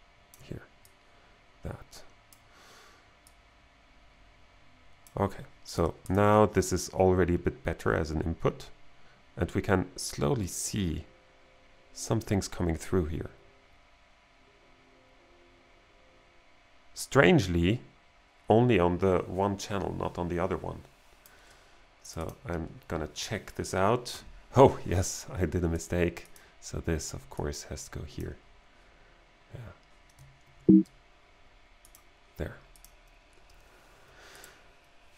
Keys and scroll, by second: 30.5 super+s.